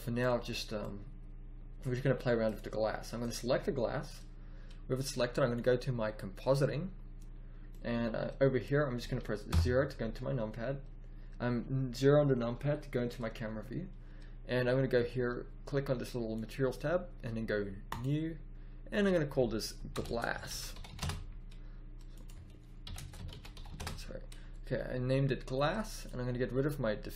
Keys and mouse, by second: 7.6-8.5 middle drag, 9.4 KP_0, 20.9 s, 23.7 s.